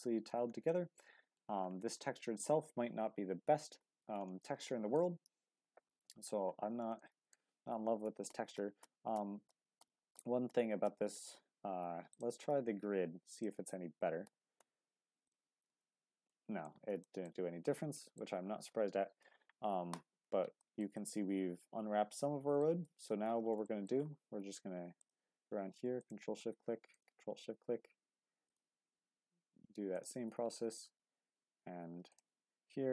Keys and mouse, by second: 0.7-1.4 middle drag, 4.4 middle click, 5.6 Tab, 7.0 shift+middle click, 8.1 ctrl+z, 8.6-11.4 ctrl+z, 15.7 Tab, 16.3 click, 17.0 shift+click, 17.9 shift+drag, 20.6 shift+middle click, 20.9-22.6 middle drag, 22.9 Tab, 23.6 shift+middle click, 26.0 ctrl+shift+click, 28.4 ctrl+shift+click.